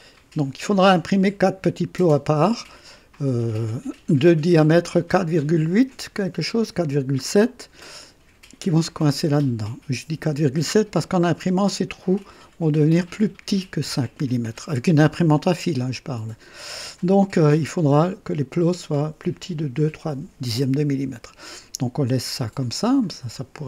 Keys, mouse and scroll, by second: 2.8-3.6 typing, 15.3-16.3 drag, 22.6 click.